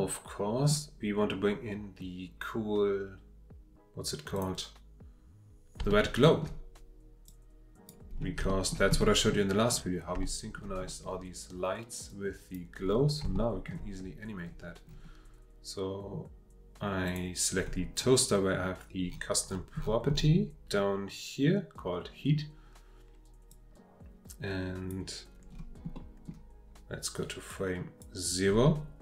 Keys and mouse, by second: 4.7 click, 5.9-6.4 shift+middle drag, 7.3-7.9 drag, 8.5 shift+middle drag, 9.0-9.7 middle drag, 10.2-10.6 shift+middle drag, 10.8 click, 12.1-12.6 drag, 13.3-13.7 shift+middle drag, 23.5-24.9 drag, 26.0 click, 27.5 click.